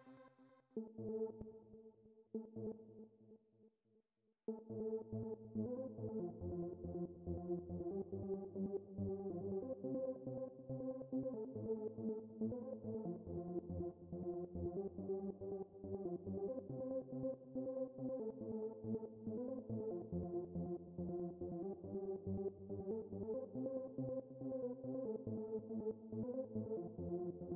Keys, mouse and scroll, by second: 0.3 space, 2.1 space, 3.5 click, 4.2 space, 10.4-11.5 drag, 11.8 right click, 17.5-19.8 drag, 20.5-21.3 drag, 22.7 click, 25.2 click.